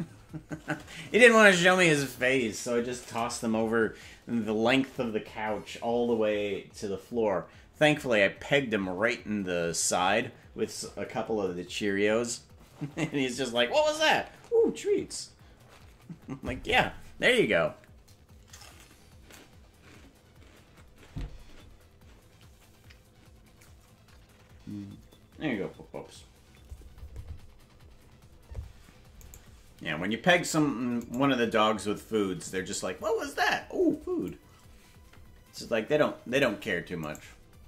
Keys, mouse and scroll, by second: 31.2 right click, 34.2-36.4 drag, 37.2 shift+right click.